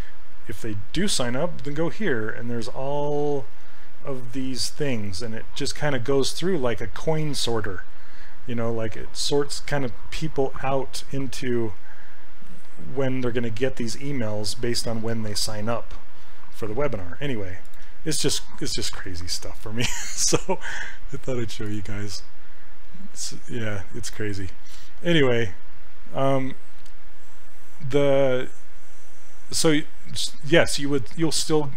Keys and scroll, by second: 18.0 ].